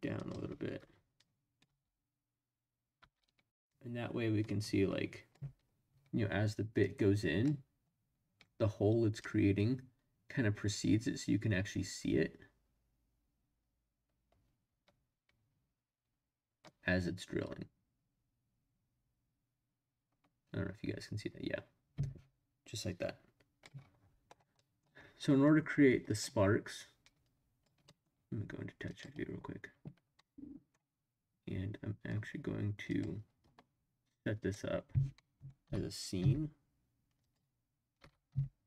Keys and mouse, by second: 0.2 click, 1.2-1.6 drag, 1.6 space, 3.0 space, 3.7-5.3 drag, 6.8 click, 9.2-23.6 drag, 24.5 middle drag, 26.1 click, 27.2 click, 27.8 middle click, 29.3 click, 30.1-30.8 middle drag, 32.9 click, 35.2 middle drag, 35.6 g, 36.2 z, 37.2 click, 38.0 g, 38.3 x.